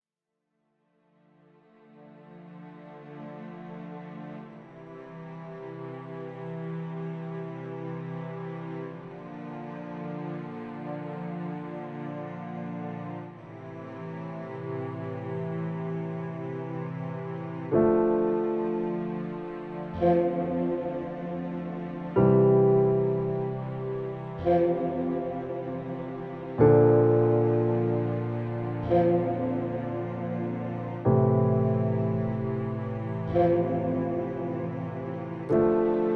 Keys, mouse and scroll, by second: 0.6 click, 1.3-2.2 drag, 4.6 click, 5.7-7.7 drag, 9.2 click, 10.8 click, 22.0-24.1 drag, 33.0 click, 34.1-36.1 drag.